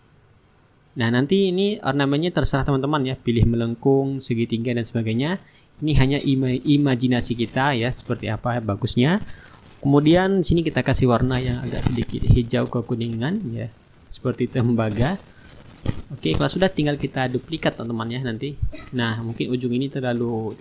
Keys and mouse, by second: 1.9 click, 4.2 ctrl+click, 8.0 click, 9.6 click, 11.4 click, 14.6 click, 17.3 click, 18.8 click, 20.2-20.6 drag.